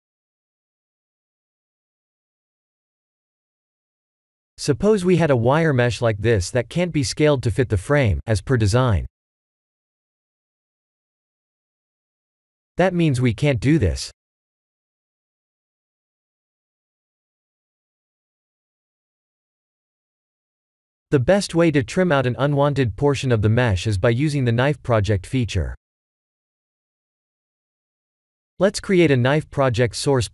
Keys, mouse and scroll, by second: 1.3 s, 9.8 click, 11.7 ctrl+a, 12.8 click, 13.5 click, 14.5 click, 15.0 click, 16.1 s, 18.1 middle click, 18.6 middle click, 18.8 click, 19.2 middle click, 21.1 KP_1, 21.4 KP_7, 22.2 ctrl+z, 22.7 ctrl+z, 23.2 click, 29.7 shift+a.